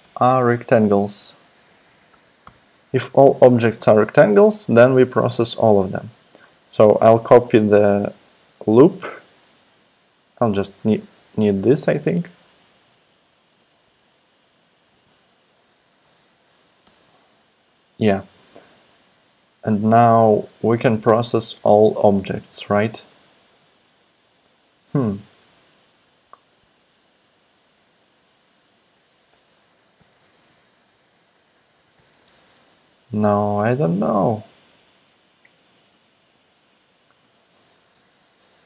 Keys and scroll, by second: 0.0 Tab, 1.7 Right, 1.8 space, 2.1 shift+[, 2.4 Return, 8.7 super+c, 11.2 shift+super+Left, 11.6 super+c, 14.9 super+v, 16.0 shift+}, 16.6 Left, 16.8 Return, 29.3 Right, 29.7-32.4 typing, 38.2 BackSpace, 38.5 Return.